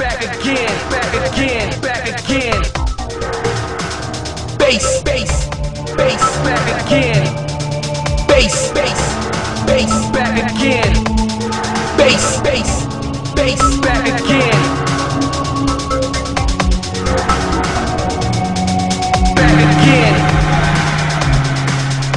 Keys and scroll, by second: 0.6 alt+space, 6.2 ctrl+z, 10.7 ctrl+z, 11.9 ctrl+z, 14.3 ctrl+z, 16.8 ctrl+z, 20.6 ctrl+z.